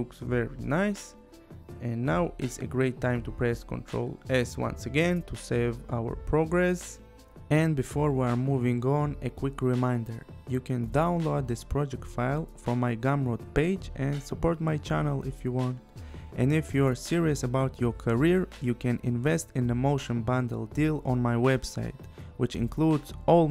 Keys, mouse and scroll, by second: 0.5 click, 1.9 click, 3.6 click, 6.4 ctrl+s, 7.5 space.